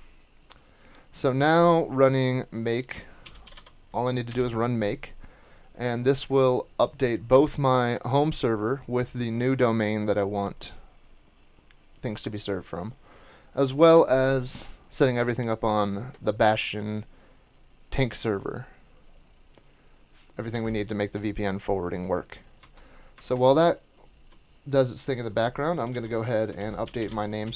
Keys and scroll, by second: 3.0-4.4 typing, 4.3 Return, 22.6 super+Tab, 23.1 super+Tab, 23.3 super+Tab, 25.9 super+t, 26.5 alt+c, 26.6-27.5 typing.